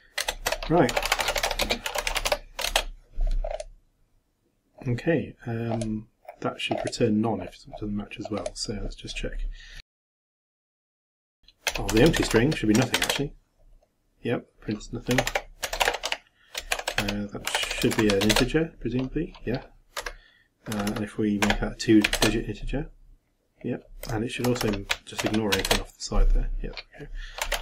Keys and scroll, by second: 2.7 shift+Return, 10.9-12.7 typing, 13.0 shift+Return, 16.5-18.4 typing, 22.1 shift+Return, 25.2 shift+=, 25.6 shift+Return.